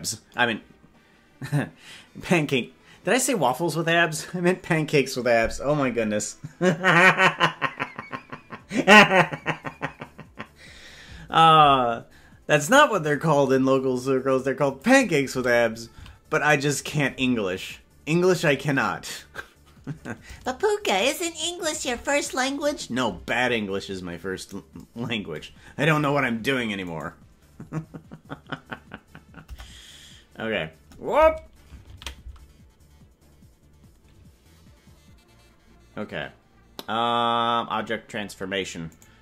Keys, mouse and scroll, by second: 13.4-14.8 drag, 16.0 s, 20.3-21.8 shift+drag, 26.8-29.9 right drag, 29.9 Delete, 38.9-39.2 right drag.